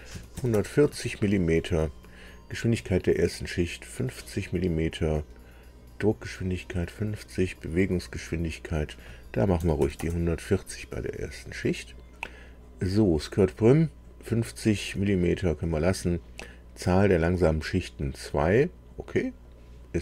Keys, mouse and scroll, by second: 0.1 KP_1, 0.3 KP_4, 0.5 KP_0, 0.9 Tab, 8.5 click, 9.5 KP_1, 9.8 KP_4, 10.0 KP_0, 12.9 click, 19.4-20.0 drag.